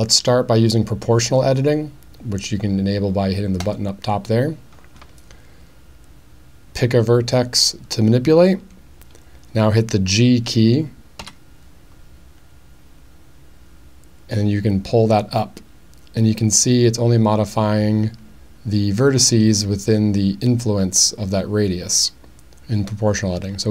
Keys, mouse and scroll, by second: 3.6 click, 11.2 g.